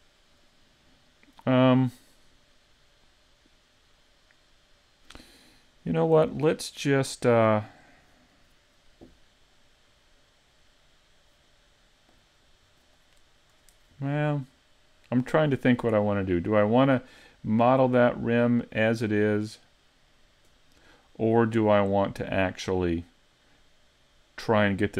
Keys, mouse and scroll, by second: 0.4 right click, 6.2 a, 6.7 middle click, 22.8 middle click.